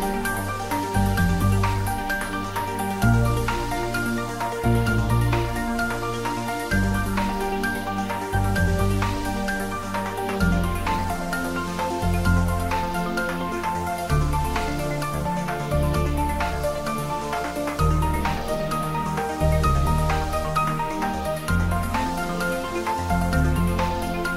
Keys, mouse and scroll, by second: 0.6 click, 1.2 Tab, 2.0 click, 3.0-4.3 middle drag, 4.3 click, 4.8 middle click, 5.6 click, 6.0-6.8 typing, 6.8-8.5 ctrl+middle drag, 8.5 3, 9.0 click, 9.5 shift+click, 15.3 ctrl+z, 17.9 shift+click, 22.4 click, 23.3 middle click, 23.9 click.